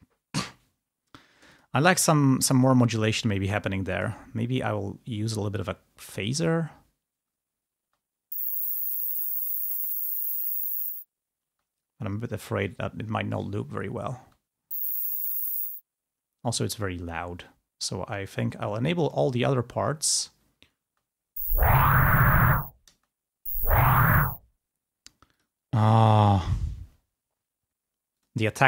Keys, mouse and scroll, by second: 1.7 click, 3.2 click, 4.0 click, 6.4 click, 8.0 space, 11.7 space, 14.4 space, 15.6 space, 19.1-19.6 scroll down 2, 19.9-20.3 scroll down 2, 21.0 space, 22.1 click, 22.6 space, 24.3 space, 28.3 click.